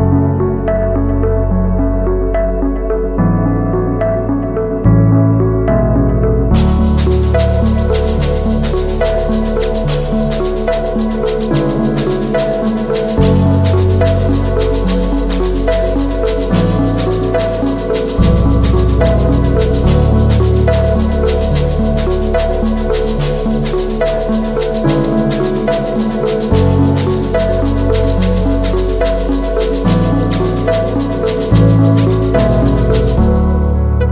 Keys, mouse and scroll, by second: 4.6 alt+BackSpace, 6.9 ctrl+d, 11.7 ctrl+t, 19.3 ctrl+click, 23.8 ctrl+click, 28.2 Return, 29.9 Down.